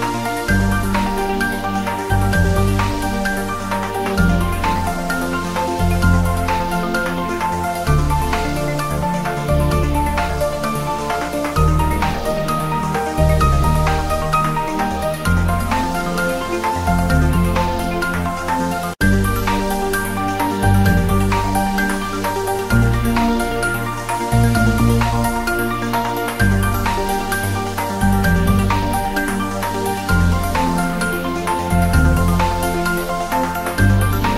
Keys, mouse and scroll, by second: 1.7 click, 3.0 click, 5.2 click, 8.4-8.8 scroll down 1, 8.8 click, 11.1 click, 13.9 click, 18.5 click, 19.7 g, 20.4 click, 20.5 scroll up 1, 20.8 Tab, 21.0 click, 21.1 Tab, 21.3 click, 21.5 Tab, 21.7-22.3 scroll up 1, 22.3 click, 23.1 3, 23.3-23.8 scroll down 1, 23.8 click, 24.3 alt+shift+click, 25.4 ctrl+z, 26.3 click, 26.6 alt+shift+click, 29.6 scroll down 1, 31.3 click, 31.5 ctrl+z, 31.6 scroll down 1, 32.7 alt+shift+click, 33.5 alt+shift+click, 33.9 ctrl+z, 34.1 scroll up 1.